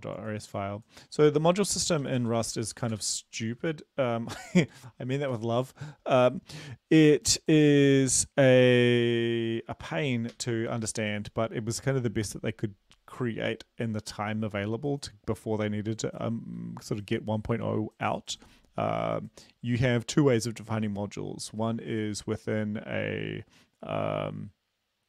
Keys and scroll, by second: 2.1-2.7 typing, 3.0 Return, 3.7 ctrl+v, 4.8 ctrl+a, 5.4 BackSpace, 9.5 ctrl+v, 10.4 ctrl+s.